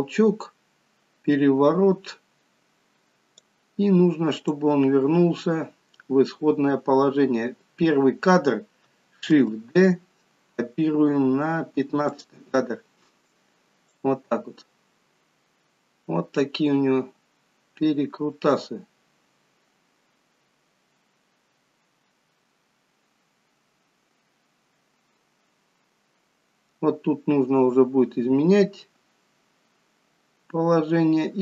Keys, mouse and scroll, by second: 4.4 click, 9.3 shift+d, 14.0 click.